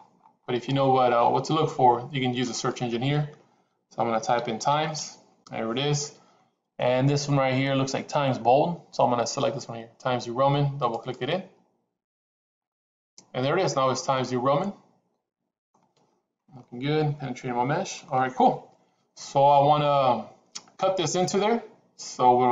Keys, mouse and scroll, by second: 13.5-15.7 middle drag, 16.5-18.0 middle drag.